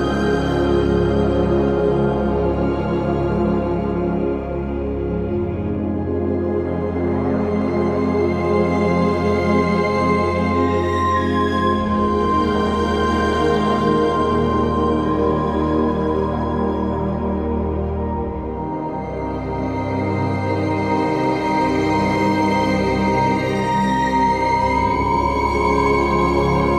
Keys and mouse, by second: 0.2 alt+click, 1.9 alt+shift+click, 5.2 alt+shift+click, 10.3 alt+shift+click, 12.0 ctrl+click, 17.7 shift+click, 18.8 shift+click, 20.9 shift+click, 22.5 shift+click, 24.9 shift+click.